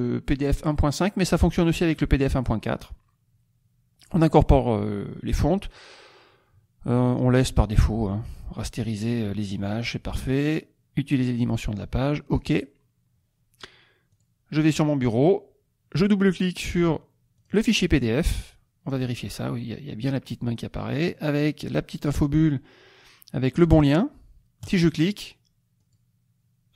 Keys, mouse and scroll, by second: 0.9 click, 2.4 click, 12.2 click, 14.0 click, 15.0 click, 17.3 click, 24.6 click, 25.8 click.